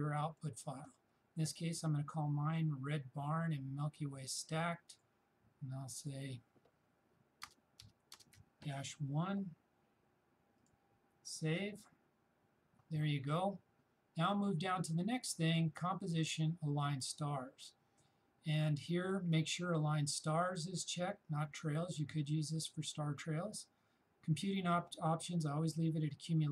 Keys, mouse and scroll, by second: 4.9 shift+click, 7.5 shift+space, 7.8 shift+-, 8.2 shift+space, 8.4 shift+1, 10.6 shift+click, 15.5 shift+click.